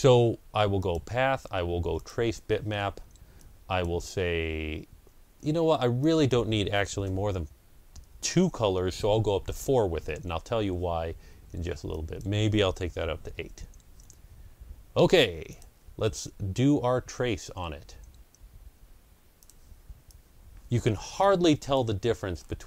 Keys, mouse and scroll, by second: 0.7 click, 0.7 ctrl+scroll down 1, 1.8 click, 3.3-9.9 drag, 6.9 KP_4, 9.9 Return, 11.8 click, 13.0 KP_8, 13.2 Return, 15.4 click, 19.3 click, 19.9-22.6 drag, 22.2 ctrl+scroll up 1.